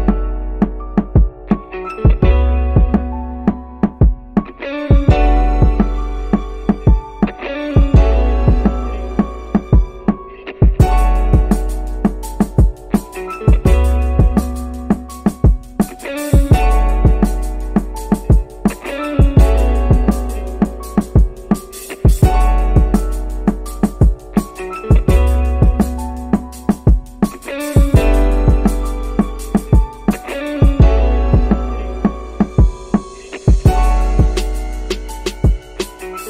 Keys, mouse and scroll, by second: 2.2 middle click, 3.2 middle click, 5.8 middle click, 7.3 middle click, 9.9-11.2 drag, 11.8-13.5 drag, 15.0 click, 15.7 middle click, 17.1 shift+s, 22.0-25.2 right drag, 27.3 click, 28.6 shift+click, 30.4 shift+s, 32.9 middle click.